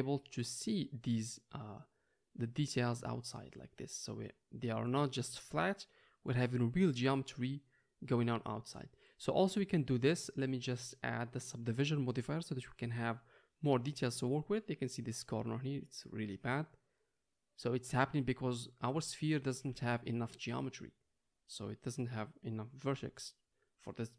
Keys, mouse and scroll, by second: 10.0-24.1 middle drag.